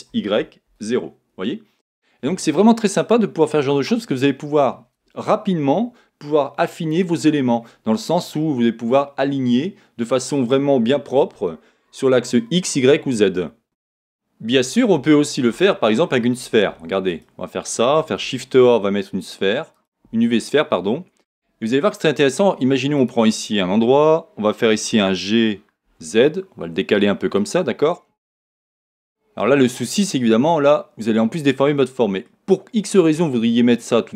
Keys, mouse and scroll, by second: 1.4 Return, 3.2-14.6 middle drag, 15.8 x, 18.2 shift+a, 20.3-22.2 middle drag, 20.3-21.2 scroll up 2, 21.2 scroll up 1, 21.2 Tab, 21.6 scroll down 2, 22.3 middle click, 23.0 click, 25.1 g, 27.5 click, 27.9-34.1 middle drag, 32.6-34.1 scroll up 2.